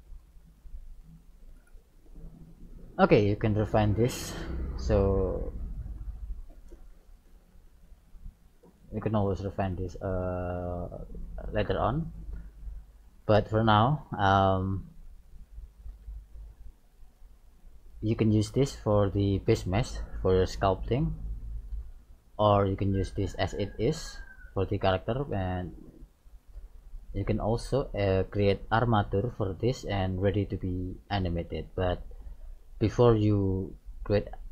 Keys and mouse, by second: 0.4 right click, 0.5 g, 4.0 right click, 5.1-6.9 drag, 7.7 ctrl+a, 9.5 click, 9.7 middle click, 10.0 click, 10.5-12.1 middle drag, 13.7-17.2 middle drag, 19.3-20.6 middle drag, 22.9-24.9 middle drag, 33.9-34.5 middle drag.